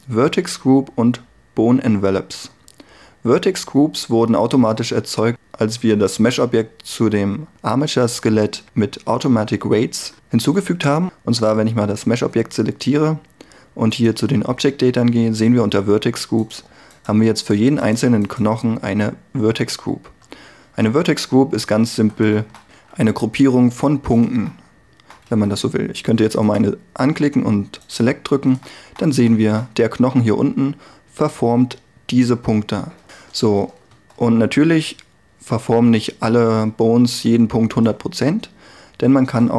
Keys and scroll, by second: 20.3 Tab, 22.1 a, 22.9 c, 25.4 a, 34.0 Tab, 37.2 r.